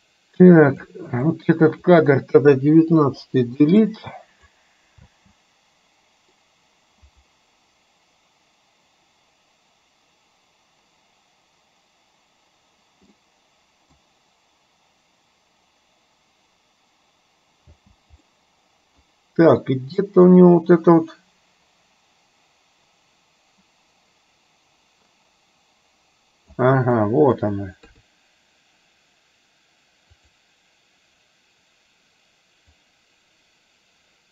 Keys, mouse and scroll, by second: 1.3-2.0 drag, 3.0 Delete, 4.0 click, 5.1 space, 13.3-14.0 middle drag, 17.8 space, 18.4-19.1 middle drag, 20.1-26.8 drag, 27.0-27.4 middle drag, 28.0 KP_3, 30.3 click, 32.9-34.3 drag.